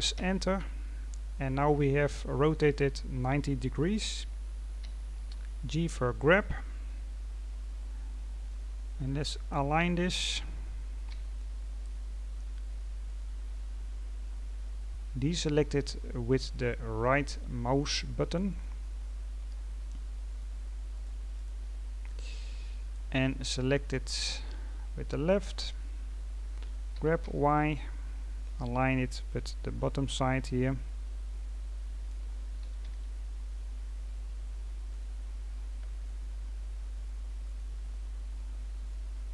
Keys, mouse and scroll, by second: 2.6-4.8 scroll down 1, 4.8 g, 8.8-10.0 scroll up 14, 10.0-11.0 scroll down 1, 11.0 g, 13.4-14.0 scroll down 10, 18.4 right click, 20.2 right click, 20.9 right click, 21.3 right click, 22.7-24.8 drag, 24.8-25.6 scroll up 3, 25.6-26.9 scroll down 2, 26.9 g, 29.6-31.3 scroll up 13, 31.3-32.6 scroll up 4, 32.6 g, 35.1-35.7 scroll down 9, 36.0-36.8 scroll down 11, 36.8-37.4 scroll up 1, 37.4 right click, 37.8 scroll down 3, 38.3-39.1 drag, 39.1-39.3 scroll up 3.